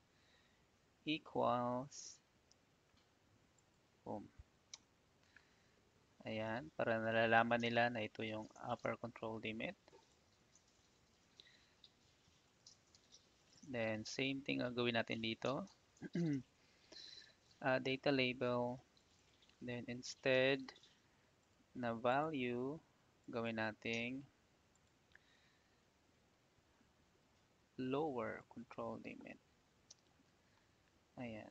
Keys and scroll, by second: 2.4 =, 4.7 Return, 25.6 =, 29.8 Return.